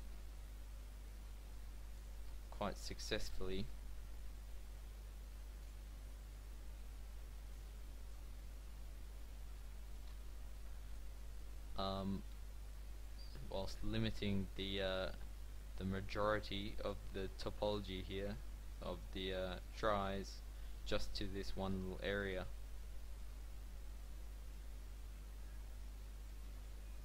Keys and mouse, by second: 2.8 KP_7, 4.2 g, 5.8 g, 8.3 Tab, 9.4 z, 10.1 a, 12.0 Tab, 26.5 Tab.